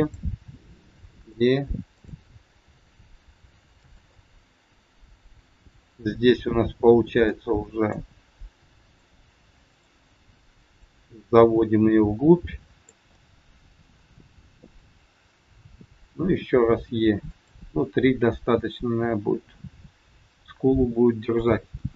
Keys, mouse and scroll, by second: 0.4 e, 1.9 click, 2.6 e, 4.1 middle click, 7.2 click, 8.7 click, 10.7 click, 13.1 middle click, 16.3 e, 17.7 middle click, 21.7 KP_1.